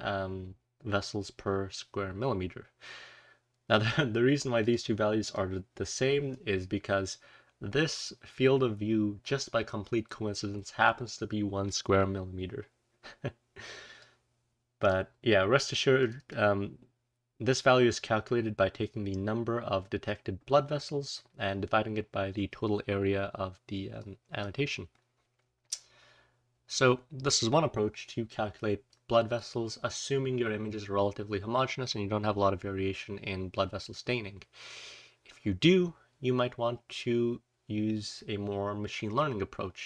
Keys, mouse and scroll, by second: 4.5 click, 5.2 click, 6.6-7.1 scroll down 2, 7.1-9.6 scroll down 1, 13.9-14.8 drag, 15.9 click, 16.1 click, 16.8-18.3 scroll down 2, 18.3-18.9 scroll up 2, 18.9-19.5 scroll up 1, 19.5-20.5 scroll up 1, 20.5-22.5 scroll up 3, 22.5 scroll down 1, 22.6 scroll up 2, 22.6-23.9 scroll down 2, 23.9-24.3 drag, 24.3 scroll down 1, 24.6-27.3 scroll up 1, 27.3-28.2 scroll up 1, 28.2-29.6 scroll down 1, 28.8-29.3 drag, 36.0-36.6 scroll up 2, 36.6 scroll down 1, 38.0 click.